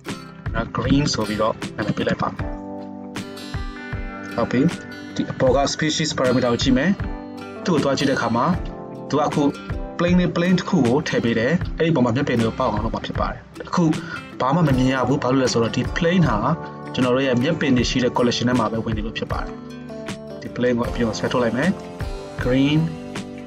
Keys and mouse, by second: 0.1 click, 0.5-4.9 shift+middle drag, 1.0 e, 4.9-17.3 drag, 17.3 middle click, 17.4-19.6 drag, 19.6-21.8 middle drag, 21.8-23.4 drag.